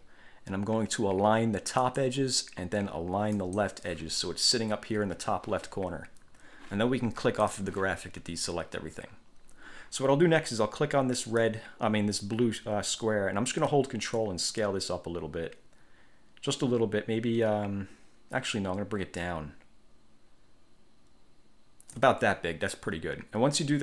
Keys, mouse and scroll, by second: 2.0 click, 3.5 click, 7.6 click, 11.4 click, 14.3-22.3 ctrl+drag.